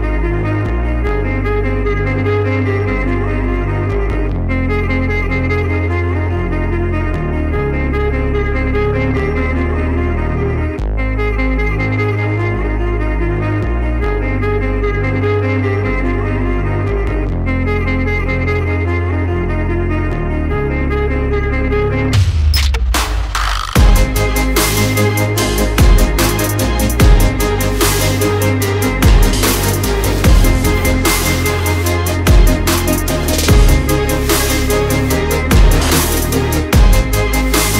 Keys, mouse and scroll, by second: 0.9 alt+scroll down 1, 1.2 alt+scroll up 1, 1.9 click, 4.4-4.8 alt+scroll down 1, 4.8-5.1 alt+scroll up 1, 5.5 click, 6.2-6.8 shift+Up, 6.9 shift+Up, 7.1 shift+Up, 7.6 shift+Up, 8.0 shift+Left, 8.4 shift+Right, 9.3 alt+scroll up 1, 9.6 click, 10.1 shift+Up, 10.5 shift+Up, 10.9 shift+Down, 11.9 alt+scroll down 1, 12.3 click, 14.0-14.3 alt+scroll up 1, 14.3 alt+scroll down 1, 15.1 click, 15.9 shift+Left, 16.0 shift+Left, 17.4 click, 19.3-19.6 alt+scroll, 19.6 alt+scroll up 1, 20.0 click, 21.4 click, 22.6 shift+Left, 23.1 shift+Right, 23.6 Left, 23.8 Left, 24.8 click, 26.4 click, 29.6 click, 31.2 click, 33.4 double click, 33.6 alt+scroll down 1, 34.3 alt+scroll up 1, 34.9 alt+scroll down 1, 35.4-35.9 scroll up 2.